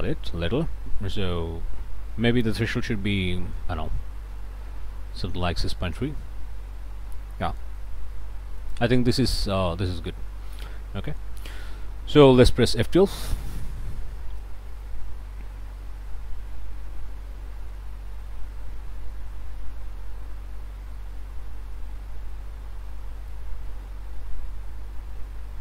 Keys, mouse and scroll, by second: 2.8 shift+middle click, 7.0-7.3 scroll up 2, 7.4 click, 8.2-8.6 scroll up 4, 8.6 click, 9.2 click, 10.2-10.5 scroll up 1, 10.8 scroll up 1, 11.4 middle click, 13.0 F12, 20.5-20.8 scroll up 1, 21.3 scroll up 1, 23.3-25.6 drag.